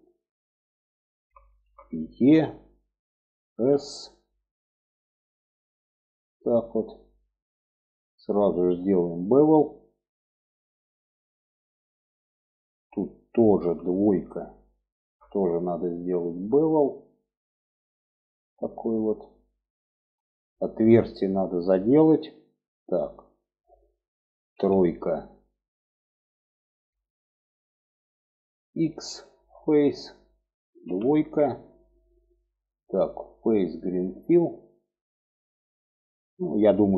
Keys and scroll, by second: 1.6 e, 2.9 s, 13.0 2, 23.9 3, 28.4 x, 30.2 2.